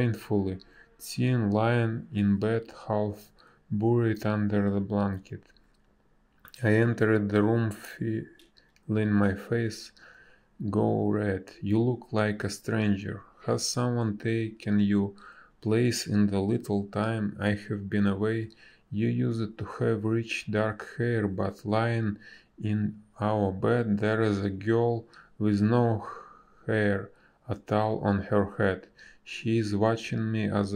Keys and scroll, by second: 2.9 ctrl+z, 3.3 ctrl+z, 4.2 ctrl+z, 4.8 ctrl+z, 5.2 space, 10.8 ctrl+z, 13.4 ctrl+z, 13.5 space, 17.7 z, 18.3 ctrl+z, 18.9 b, 24.0 space, 28.2 space, 30.2 space.